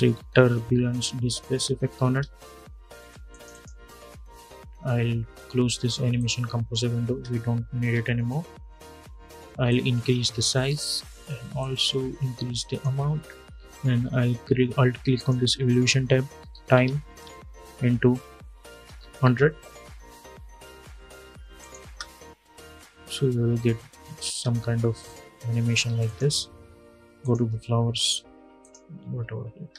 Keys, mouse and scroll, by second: 0.0-2.2 typing, 3.0 click, 5.9 click, 6.8 space, 9.4-14.9 drag, 15.9-19.3 typing, 21.3 click, 21.6 space, 24.0 space, 25.8 click, 29.3 space.